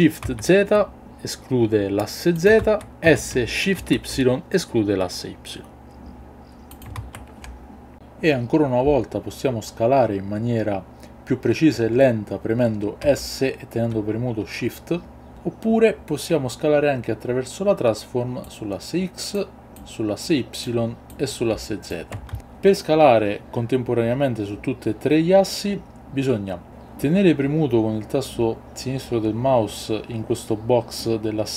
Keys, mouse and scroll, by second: 0.2 shift+z, 2.4 click, 2.6 ctrl+z, 3.8 shift+y, 6.7 click, 7.0 ctrl+z, 15.3 ctrl+z, 18.5 click, 19.8 click, 21.1 click, 22.3 ctrl+z, 22.4 ctrl+z, 31.0-31.5 drag.